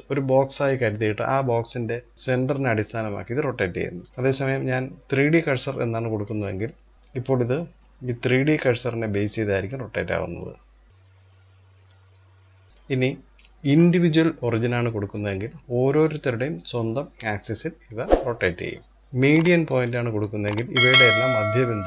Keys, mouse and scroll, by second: 1.9 click, 4.1-6.7 drag, 8.2 click, 12.7-15.2 drag, 15.6 click, 19.0-20.7 drag, 21.4 click.